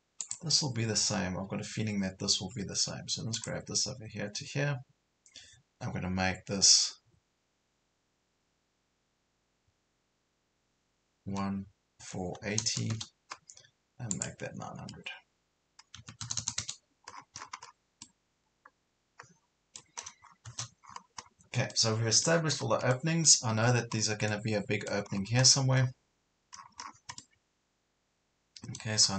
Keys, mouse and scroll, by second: 0.3 click, 2.7 Escape, 3.4 click, 11.3 KP_1, 12.0 KP_4, 12.5 KP_8, 14.1 click, 16.0 KP_9, 17.1 scroll down 1, 17.7 scroll down 1, 18.0-20.0 middle drag, 20.0 scroll down 1, 20.9 scroll up 1, 21.7 middle click, 22.5 scroll down 1, 22.9 middle click, 23.6 scroll up 1, 24.3 middle click, 25.1 scroll up 1, 26.6 scroll down 1, 27.2-29.0 middle drag, 29.0 scroll down 1.